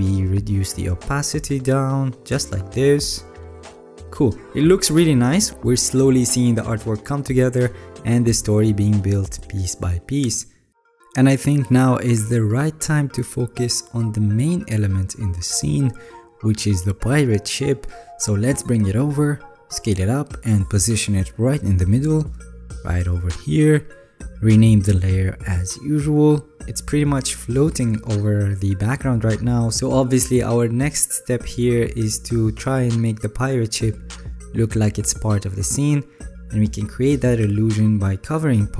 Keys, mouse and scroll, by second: 5.8 alt+scroll, 5.9-6.7 alt+scroll down 6, 6.7-7.9 alt+scroll down 8, 8.2 alt+scroll down 3, 8.8 alt+scroll down 2.